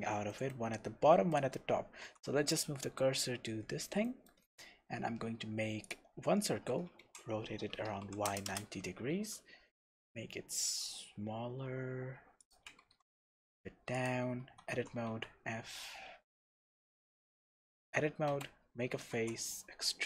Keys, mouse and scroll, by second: 2.0 shift+s, 3.0-3.4 scroll up 2, 3.4 Tab, 4.4 shift+a, 7.0 r, 8.6 KP_Enter, 9.1 s, 12.5 click, 12.8 g, 14.1 click, 14.4 Tab, 14.7 e, 16.4 Escape, 17.3 Tab, 18.3 f, 19.1 e.